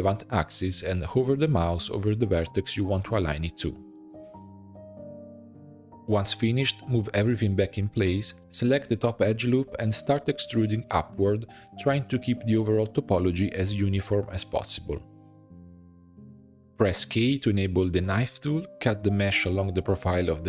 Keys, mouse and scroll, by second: 0.0 click, 0.3 g, 1.3 shift+middle click, 1.9 click, 2.4 g, 3.4 click, 3.6 g, 4.7 g, 5.5 click, 6.0 shift+middle click, 6.6 g, 7.7 shift+middle click, 8.4 e, 9.3 e, 10.0 e, 11.2 e, 12.1 e, 13.2 e, 14.2 e, 15.5 e, 16.6 shift+middle click, 17.0 k.